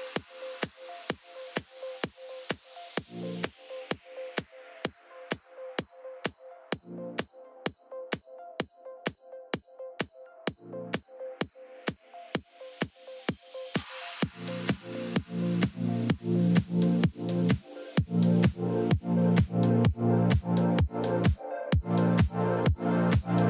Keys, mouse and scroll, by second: 10.5 right click, 10.6 scroll down 1, 10.8 middle click, 11.7 right click, 13.4-14.0 scroll down 1, 14.2 middle click, 15.9 right click, 17.4-17.8 scroll down 1, 18.3 middle click, 19.3 scroll down 1, 19.4 middle click, 21.3 scroll down 1, 21.8 middle click.